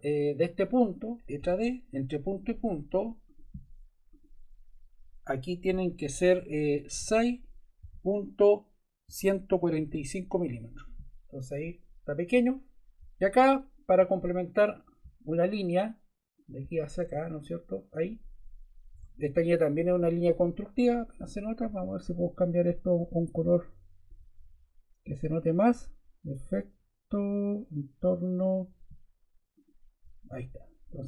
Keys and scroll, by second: 1.4 d, 7.0 6, 7.8 ., 9.0-10.4 typing, 10.5 Return, 18.9 Escape.